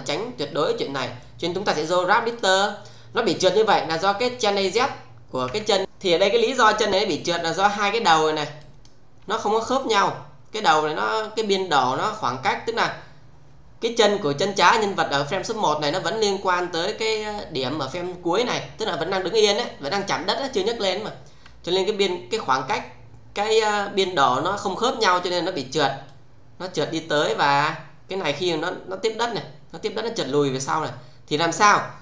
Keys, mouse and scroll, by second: 2.3 click, 4.3 click, 5.5 f, 5.8 click, 7.3-8.0 click, 8.5 shift+click, 26.0-32.0 click.